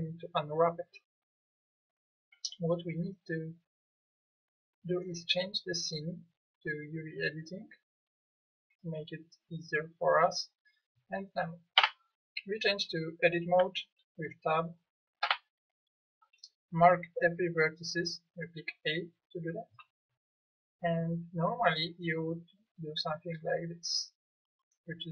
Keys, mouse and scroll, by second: 4.9-6.0 middle drag, 6.9 middle click, 11.8 Tab, 15.2 a, 16.2 a.